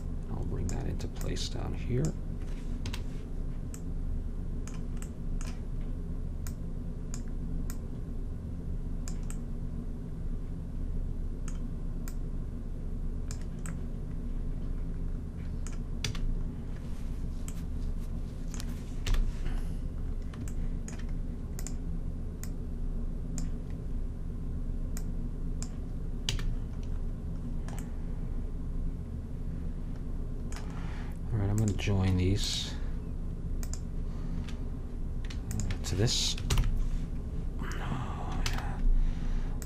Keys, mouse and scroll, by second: 2.9 KP_Decimal, 6.6-9.4 drag, 9.4-11.0 middle drag, 12.2-13.8 drag, 13.8-15.6 middle drag, 16.2 a, 19.1 KP_1, 21.7-24.4 drag, 25.1-27.0 drag, 26.4 a, 31.7-37.5 drag, 36.6 ctrl+j, 38.6 ctrl+z.